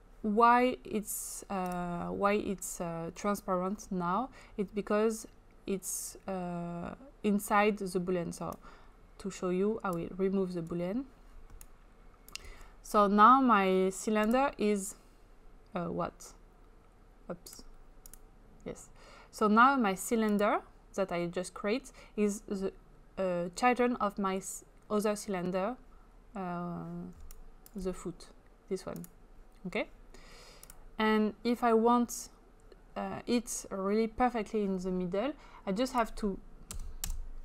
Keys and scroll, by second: 36.7 0, 37.1 Return.